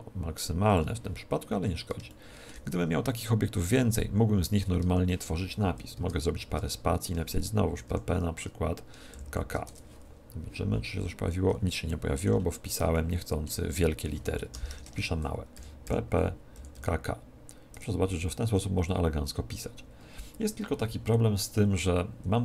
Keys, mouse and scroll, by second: 1.5-4.0 middle drag, 4.7 Tab, 5.9 space, 6.4 space, 7.7 shift+p, 7.9 shift+p, 9.1 shift+k, 9.3 shift+k, 9.6 Tab, 11.2-14.0 middle drag, 14.0 Tab, 14.4 middle click, 14.5-16.7 typing, 14.8 middle click, 17.8 Tab.